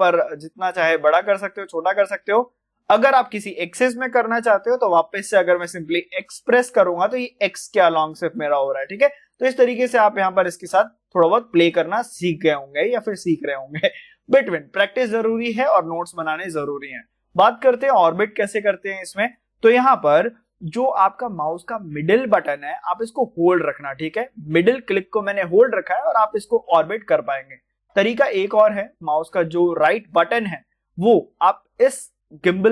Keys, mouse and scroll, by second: 6.9-7.6 typing, 8.7 click, 9.2-11.2 middle drag, 11.2 scroll down 1, 11.6-29.6 middle drag, 32.4 middle click, 32.4-32.7 drag.